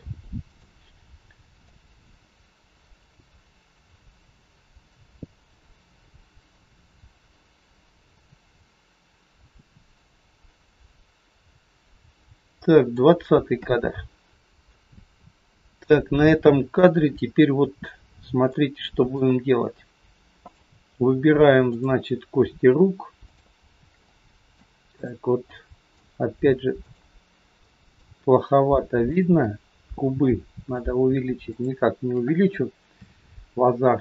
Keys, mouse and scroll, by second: 1.7 click, 14.7 shift+middle click, 18.1-18.5 scroll up 2, 18.5 middle click, 19.5-20.1 scroll up 1, 20.6 click, 21.7 click, 23.1 shift+click, 23.8 shift+click, 23.9 middle click, 24.9 click, 25.3 scroll up 1, 25.5 middle click, 26.7 click, 27.6 middle click, 29.3 shift+click, 30.3 middle click, 31.5 shift+click, 33.0 KP_3, 33.3-34.0 scroll down 2.